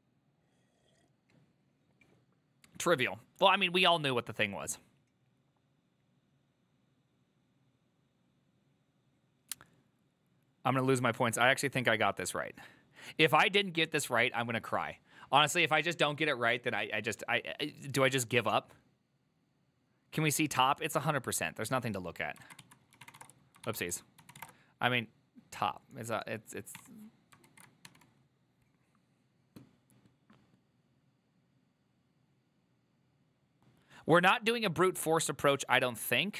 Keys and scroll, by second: 22.8-28.1 typing.